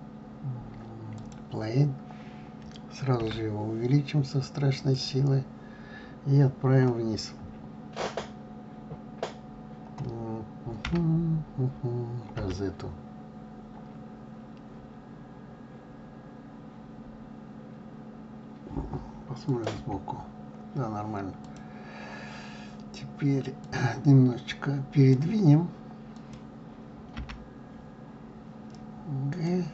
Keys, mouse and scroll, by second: 3.4 s, 11.1 g, 12.4 middle click, 19.9 KP_3, 21.5 click, 24.0 click, 26.4 click, 27.3 g.